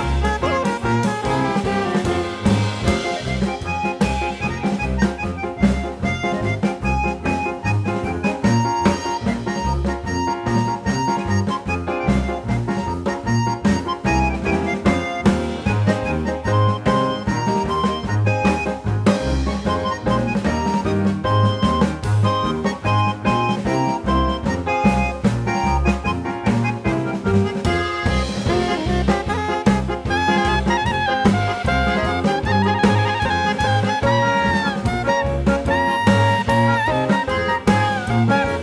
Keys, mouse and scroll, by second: 0.4 ctrl+g, 1.0 click, 3.9 click, 4.5 click, 7.7 click, 8.2 click, 8.8 click, 9.4 click, 10.3 click, 11.9 click, 12.5 click, 14.4 space, 14.5 click, 15.1 ctrl+e, 16.6 click, 17.8 click, 18.4 click, 19.2 1, 21.7 click, 22.5 click, 23.1 click, 23.8 click, 25.8 click, 26.3 click, 27.0 click, 27.4 click, 31.8 space, 32.7 click, 33.6 click, 34.0 click, 34.7 click, 36.6 click.